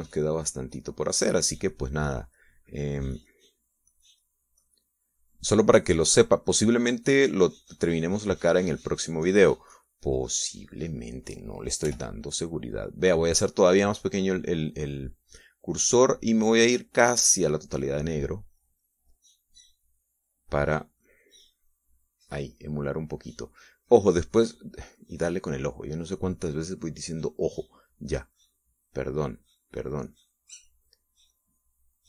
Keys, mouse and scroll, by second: 4.3-6.0 drag, 6.1-10.7 drag, 13.4 f, 14.5 click, 17.0-18.4 drag, 20.1-23.5 drag, 24.3-26.1 drag, 26.3 click, 27.1-28.2 drag, 28.3-29.3 drag, 29.6-32.0 drag.